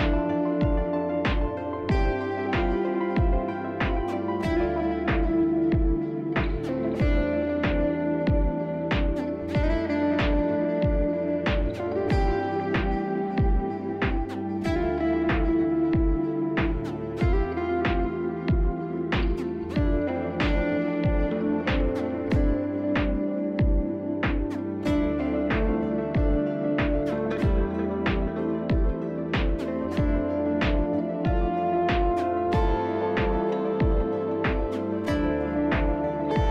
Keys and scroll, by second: 23.0 alt+q.